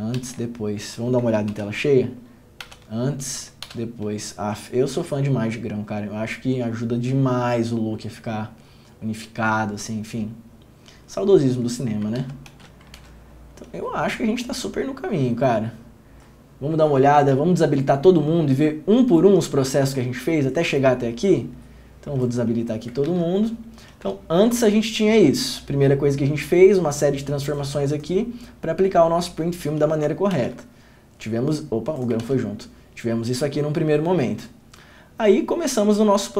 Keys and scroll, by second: 0.4 ctrl+d, 1.7 ctrl+f, 2.8 ctrl+d, 3.8 ctrl+d, 12.4 ctrl+d, 12.7 ctrl+d, 13.2 ctrl+f, 23.3 ctrl+d, 30.5 ctrl+d, 32.4 ctrl+d.